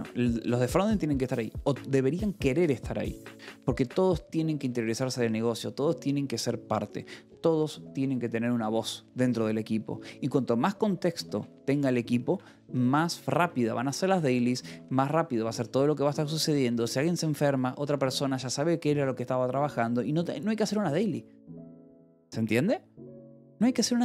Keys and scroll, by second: 11.7 shift+v, 12.2 Escape, 12.7 k, 13.8 shift+v, 13.9 Escape, 14.3 j, 14.9 Escape, 19.0 Escape.